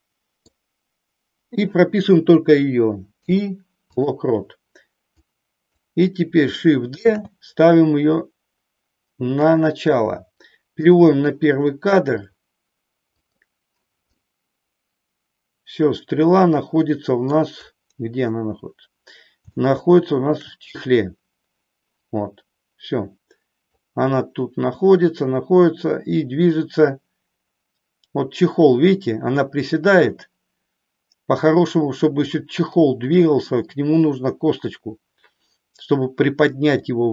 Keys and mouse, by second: 3.0 i, 5.1 click, 7.0 shift+d, 10.8 click, 11.7 middle click, 13.1 click, 14.1-17.4 middle drag, 19.5 shift+middle click, 23.9-32.4 drag, 36.9-37.1 drag.